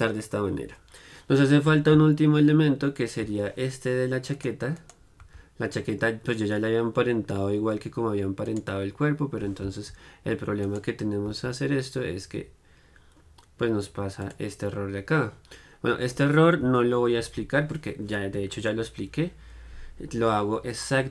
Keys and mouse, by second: 3.2-4.9 drag, 4.4-12.7 right drag, 14.6-21.1 drag.